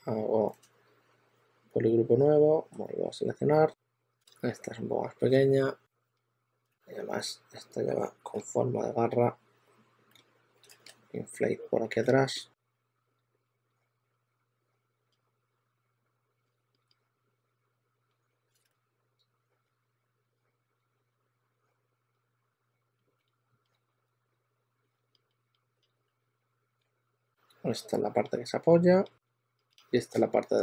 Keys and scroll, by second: 0.7 w, 4.1 super+z, 6.1-8.6 typing, 9.9 typing, 11.9-16.9 typing, 17.9-19.5 typing, 23.1 typing, 26.0-26.7 typing, 29.6 typing.